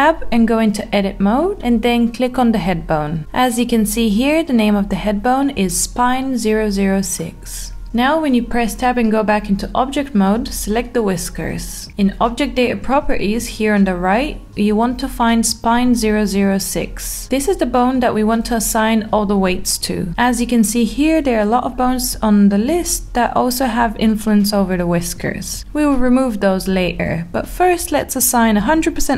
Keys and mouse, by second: 0.2 Tab, 7.1 Tab, 10.2 click.